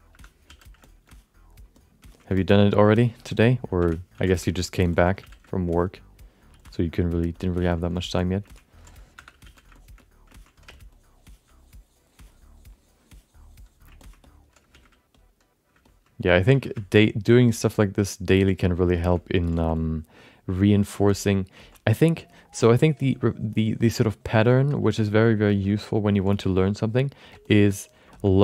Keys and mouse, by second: 0.1 4, 0.4 f, 0.8 alt+shift+middle click, 1.0 alt+middle click, 1.7 alt+middle click, 2.1 ctrl+alt+middle click, 2.3 shift+middle click, 2.5 alt+middle click, 2.9 middle click, 3.8 5, 4.1 f, 4.6 alt+middle click, 4.9 ctrl+alt+middle click, 5.2 f, 5.5 alt+middle click, 5.9 click, 6.5 f, 6.9 click, 7.3 alt+middle click, 7.7 alt+middle click, 7.9 shift+middle click, 8.1 alt+middle click, 8.4 ctrl+middle click, 9.1 4, 9.4 f, 9.7 alt+shift+middle click, 10.3 ctrl+alt+middle click, 10.6 f, 10.9-14.1 drag, 14.0 ctrl+alt+right click, 14.2 middle click, 14.7 shift+f, 15.8 ctrl+alt+middle click, 16.2 middle click, 16.5 f, 16.7 alt+shift+middle click, 17.4 alt+shift+middle click, 17.7 alt+middle click, 18.9 alt+shift+middle click, 19.1 alt+middle click, 19.5 f, 19.7-20.9 drag, 21.1 alt+shift+middle click, 21.6 ctrl+middle click, 21.9 click, 22.6 alt+shift+middle click, 22.7 middle click, 23.0-24.7 drag, 24.9 alt+middle click, 25.7 alt+middle click, 26.3 f, 26.5 click, 27.2 f, 27.4 click, 28.1 alt+shift+middle click, 28.1 alt+shift+right click, 28.2 alt+middle click.